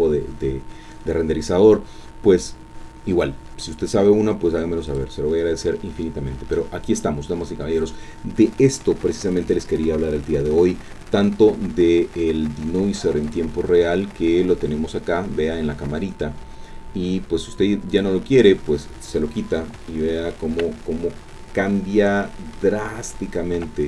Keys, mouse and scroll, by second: 4.9 click, 8.3-9.1 scroll down 2, 9.1-10.7 drag, 13.2 click, 17.9 click, 19.9-23.2 shift+drag.